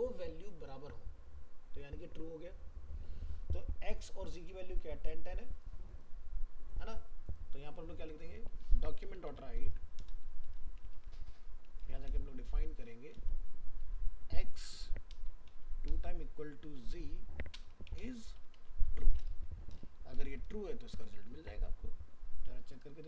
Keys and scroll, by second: 20.7 ctrl+s.